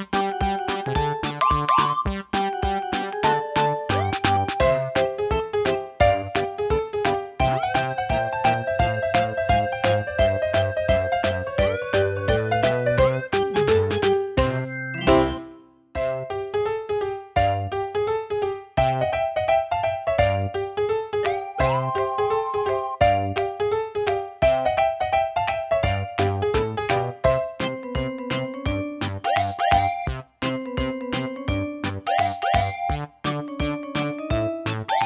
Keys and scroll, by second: 10.4 super+d, 29.4 d.